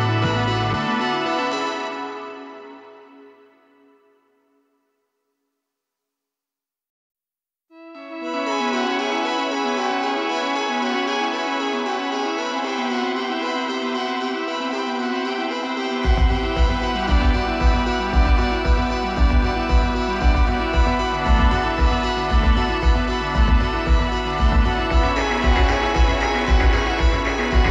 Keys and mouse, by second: 2.6-4.1 middle drag, 4.2 KP_5, 8.4-10.4 middle drag, 20.2-22.0 drag, 25.9-27.7 drag.